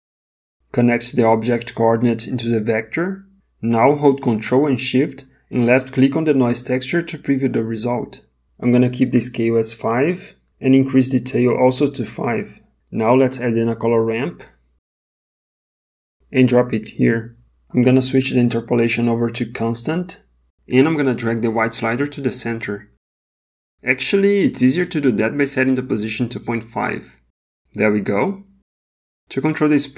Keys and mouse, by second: 1.0-2.5 drag, 5.3 ctrl+shift+click, 10.4 click, 13.1 shift+a, 18.5-19.9 drag, 21.6-23.7 drag, 24.5-26.1 drag, 29.2 click.